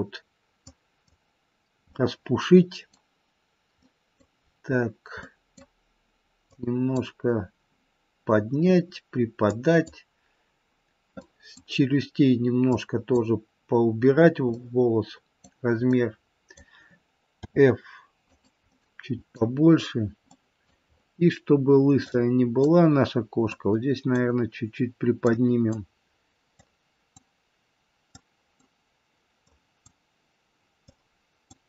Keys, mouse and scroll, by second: 0.8 click, 1.9 middle click, 3.8 middle click, 4.4-5.2 scroll down 3, 5.2 middle click, 6.6 click, 8.4 scroll down 1, 9.7 click, 11.1 middle click, 12.9 click, 14.4 middle click, 15.8 middle click, 17.3 f, 18.7 middle click, 20.3 middle click, 20.9-22.2 scroll up 4, 22.2 click, 23.6 click, 25.4 click, 26.8 click, 28.3 click, 29.6 click, 31.0 click.